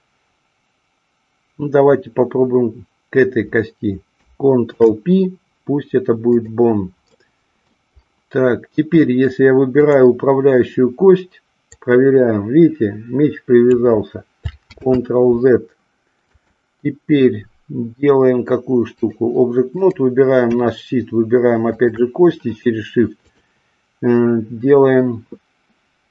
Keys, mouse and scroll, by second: 4.6 ctrl+p, 7.1-7.6 middle drag, 8.9 middle drag, 11.6-13.8 drag, 14.8 ctrl+z, 16.4-19.1 drag, 19.6 click, 21.6 shift+click, 23.2-25.1 drag.